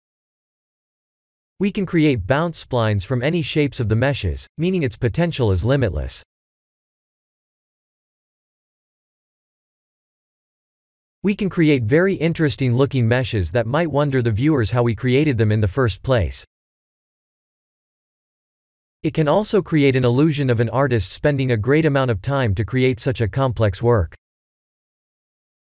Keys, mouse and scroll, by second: 0.0 BackSpace, 0.5 0, 3.6-6.7 drag, 5.3 BackSpace, 8.1-9.7 drag, 14.9-16.5 drag, 17.8-19.8 middle drag, 22.5-25.7 middle drag.